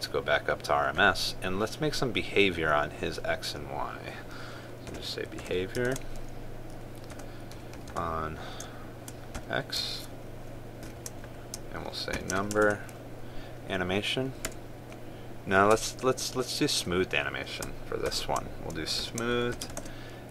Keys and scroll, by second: 6.6 ctrl+space, 13.3 ctrl+space.